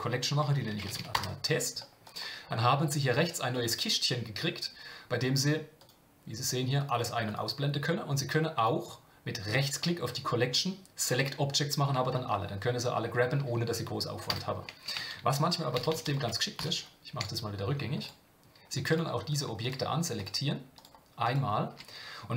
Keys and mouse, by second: 3.5 click, 5.8 click, 6.8 click, 7.2 click, 8.6 click, 9.6-11.2 right drag, 15.7-17.2 ctrl+z, 18.0-19.1 drag, 19.3 shift+click, 19.6 shift+click, 20.1 shift+click, 20.7 shift+click.